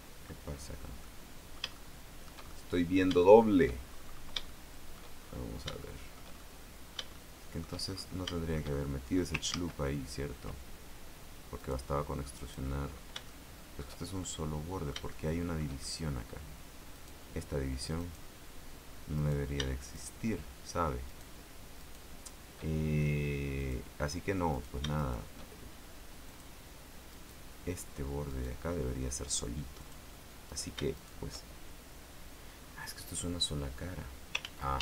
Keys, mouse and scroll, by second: 0.6-1.2 scroll down 2, 1.2-2.6 middle drag, 2.7 shift+middle click, 3.4 shift+middle click, 4.1-4.6 shift+scroll up 1, 4.6 shift+middle click, 5.4-5.7 shift+scroll up 1, 5.9 shift+middle click, 6.5-7.9 shift+middle drag, 8.1 shift+scroll down 2, 8.5-9.5 shift+middle drag, 9.7 ctrl+z, 11.7 right click, 12.5 right click, 13.1 scroll up 1, 13.4 shift+middle click, 14.4-15.9 shift+middle drag, 17.1 right click, 18.1 right click, 19.3 right click, 20.1 shift+right click, 21.2 shift+right click, 21.9 shift+right click, 23.7 click, 24.7 shift+right click, 25.1 shift+right click, 26.4 click, 27.3 right click, 28.5 right click, 29.9 click, 30.6 shift+right click, 31.1 shift+right click, 32.7-34.2 scroll down 4, 34.6 ctrl+z.